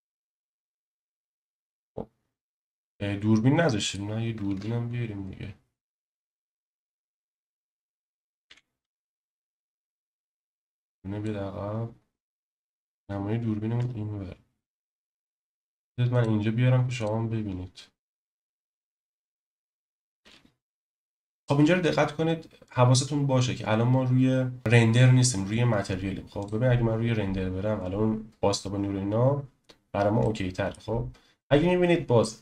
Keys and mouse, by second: 0.0 ctrl+space, 4.5 shift+a, 8.4 s, 10.3 click, 13.7 KP_0, 16.1-17.1 drag, 18.2 KP_0, 20.2 n, 30.2-30.7 middle drag.